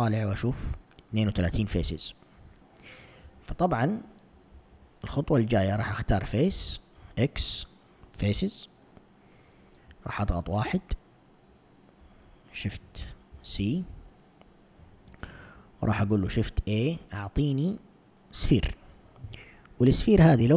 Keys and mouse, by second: 3.3 typing, 4.6 ctrl+Tab, 5.8-7.1 typing, 5.9 click, 9.9 1, 13.3 shift+c, 16.0 shift+a, 20.1 click.